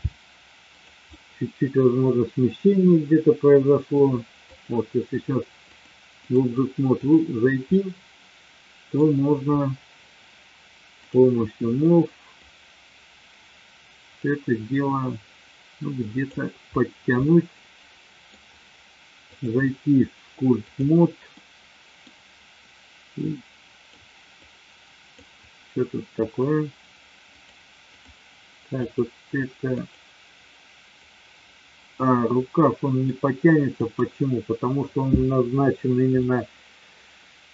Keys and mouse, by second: 1.0-3.9 middle drag, 4.4 click, 5.5-6.4 drag, 6.8-7.2 drag, 7.6-9.0 middle drag, 10.9 click, 11.8-12.4 middle drag, 14.2-16.3 drag, 17.2-18.3 middle drag, 19.4-20.9 drag, 21.3 middle click, 23.2 click, 24.4 click, 27.3-28.0 drag, 28.8 click, 29.6 click, 32.3-33.0 middle drag, 33.8 click, 36.2-37.5 middle drag.